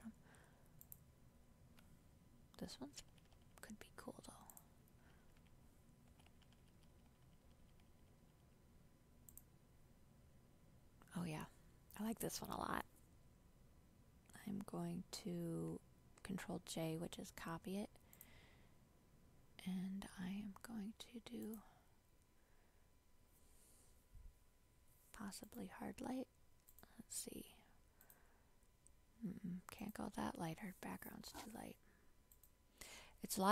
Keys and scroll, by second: 16.3 ctrl+j.